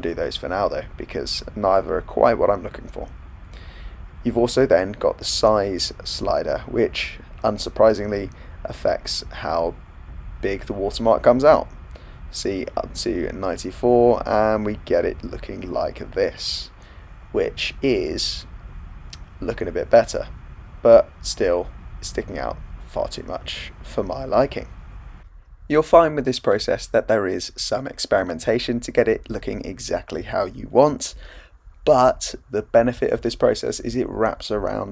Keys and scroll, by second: 26.6 super+z.